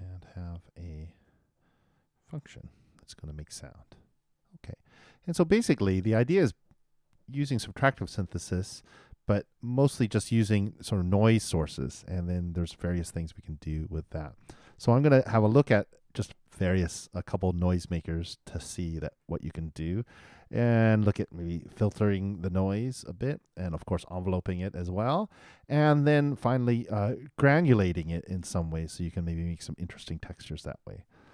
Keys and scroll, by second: 3.1 shift+].